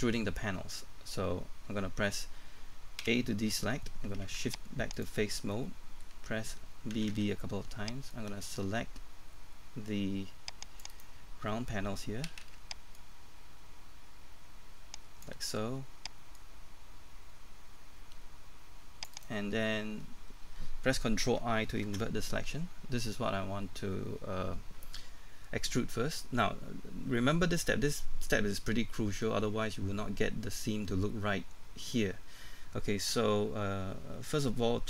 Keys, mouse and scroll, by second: 3.0 a, 3.5-4.0 scroll up 1, 4.4 ctrl+Tab, 4.9 click, 5.3 scroll down 1, 5.5 middle click, 6.9 typing, 8.1-10.9 drag, 10.9 right click, 12.3 typing, 13.0-19.1 drag, 19.1 right click, 25.7-32.2 scroll up 1.